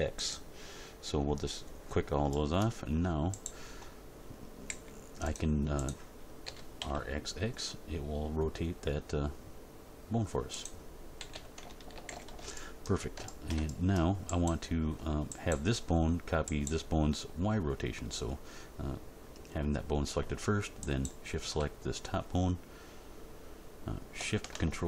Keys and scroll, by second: 4.7 g, 6.4 r, 6.7 x, 11.1 a, 11.9 alt+r, 12.1 alt+g, 12.2 alt+s.